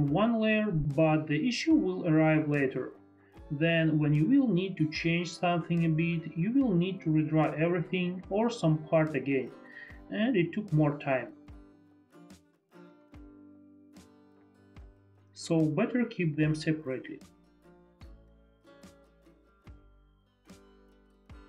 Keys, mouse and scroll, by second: 6.4 ctrl+z, 7.5 ctrl+shift+z, 8.0 shift+click, 9.9 shift+click, 11.9 ctrl+z, 12.0 click, 12.9 ctrl+z, 14.3 ctrl+z, 14.9 ctrl+z, 14.9 click, 17.2 F4, 17.3 F3, 17.3 F4, 19.8 shift+click, 20.0 click, 20.5 F4, 20.9 F3.